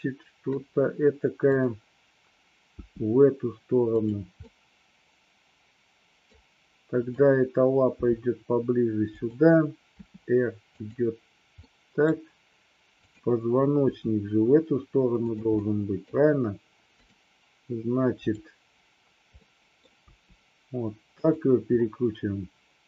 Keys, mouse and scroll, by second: 2.8 g, 4.0 click, 4.5-6.4 middle drag, 7.2 click, 7.9 g, 9.3 click, 10.0 r, 10.8 click, 11.8-12.2 middle drag, 13.2 click, 14.0 r, 15.7 middle click, 17.0 click, 18.3 click, 19.4 middle click, 20.2 r, 21.3 click.